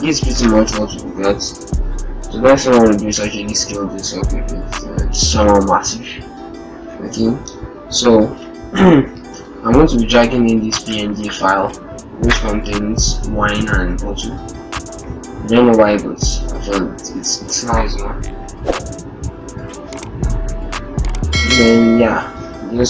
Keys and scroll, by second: 0.6 ctrl+shift+-, 0.8 ctrl+shift+0, 1.3 ctrl+shift+-, 1.6 ctrl+shift+t, 8.0 alt+Tab, 8.7 alt+shift+Tab.